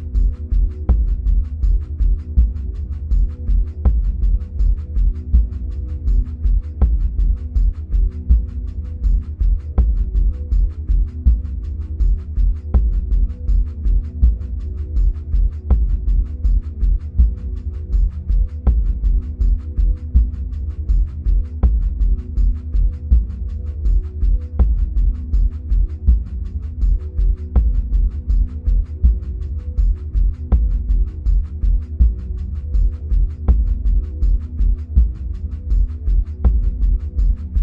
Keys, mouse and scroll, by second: 9.6-14.6 middle drag, 12.9-13.7 scroll up 2, 14.6-17.1 scroll down 2, 17.1-17.5 scroll down 1, 17.5 middle click, 17.5-26.8 ctrl+drag, 19.8 ctrl+z, 24.5 ctrl+z, 26.8-29.7 middle drag, 28.0-28.7 scroll down 2, 29.7-30.3 scroll up 2, 30.3-30.9 scroll down 2, 31.0-35.8 middle drag, 32.3-35.8 scroll up 2, 35.8 click.